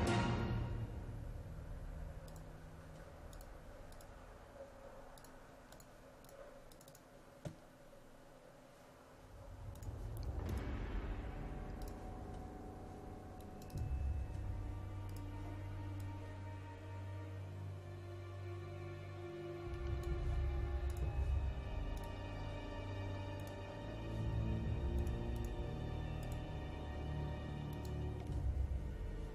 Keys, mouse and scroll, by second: 2.4-29.3 drag.